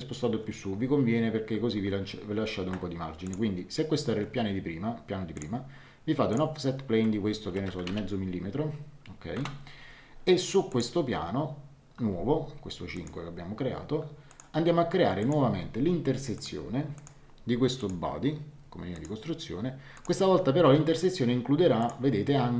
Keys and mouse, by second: 3.2 click, 5.3 click, 7.4 KP_Subtract, 7.6 KP_0, 7.8 KP_Decimal, 7.9 KP_5, 9.3 Return, 9.3 KP_Enter, 10.7 click, 12.9 click, 14.3 click, 16.3 click, 18.9 click, 19.9 click, 21.8 click.